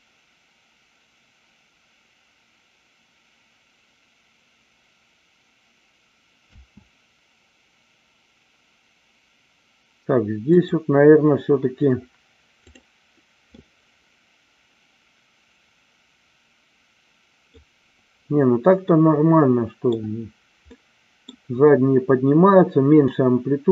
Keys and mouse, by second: 6.6 space, 10.6 click, 12.7 click, 13.5-17.7 middle drag, 18.8-19.9 middle drag, 20.7-21.3 middle drag, 23.1-23.7 middle drag.